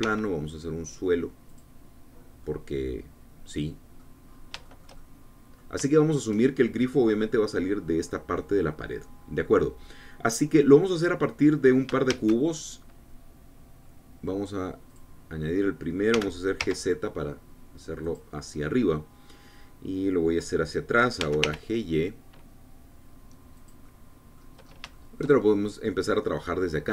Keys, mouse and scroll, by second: 0.0 click, 0.6 s, 2.1 click, 2.7-3.1 scroll down 2, 3.1-4.8 drag, 4.9 scroll up 2, 5.3-6.4 shift+drag, 9.7 click, 10.8-12.3 drag, 12.8 shift+a, 15.6 click, 16.8 g, 17.3 z, 18.7 click, 21.9 g, 22.1 y, 24.2-25.3 drag, 25.3 scroll up 1, 25.6 shift+middle click, 26.1-26.9 shift+middle drag.